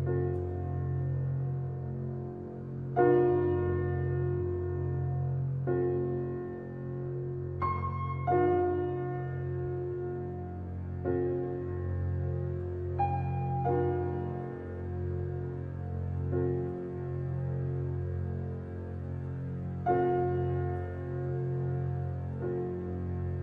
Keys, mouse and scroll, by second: 0.0-0.6 drag, 0.6-0.9 scroll down 2, 0.9-2.6 middle drag, 2.6 click, 3.2-3.5 scroll up 1, 3.5 shift+middle click, 4.4 click, 4.9 Tab, 5.5 shift+middle click, 5.9-6.2 scroll up 2, 6.2-9.4 shift+middle drag, 14.9-15.4 scroll down 1, 15.4-16.1 scroll up 1, 16.1 Tab, 16.4 click, 16.8 Tab, 18.6 click, 19.4 click, 20.5-21.3 drag, 22.2 i.